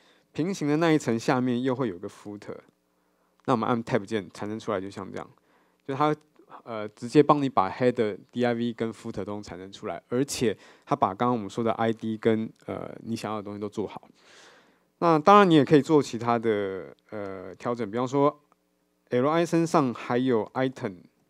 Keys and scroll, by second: 4.1 Tab, 14.9 super+z.